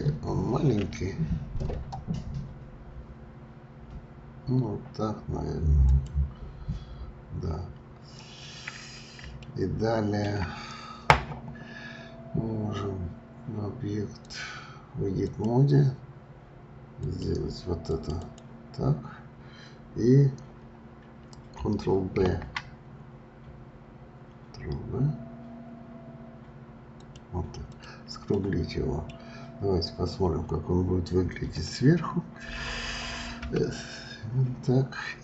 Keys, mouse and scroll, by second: 0.8 s, 8.0 scroll up 2, 9.4-12.5 shift+middle drag, 14.2-17.1 drag, 17.8 click, 18.2 click, 22.1 ctrl+b, 27.6 click, 28.3 middle click, 29.2 scroll down 3, 33.4 KP_7.